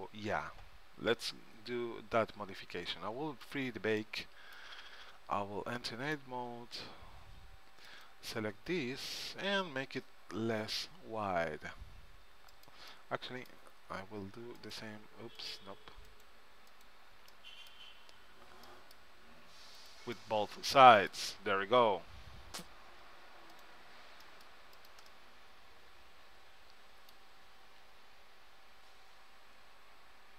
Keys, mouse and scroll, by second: 1.8-3.6 middle drag, 3.6-5.3 drag, 5.5 Tab, 8.1-9.8 drag, 9.9 s, 13.1-15.0 middle drag, 14.8-18.6 drag, 14.8 right click, 17.5-19.9 middle drag, 17.5 right click, 19.9-21.8 drag, 21.8 middle click, 22.3 c, 26.9 middle click, 27.9 s.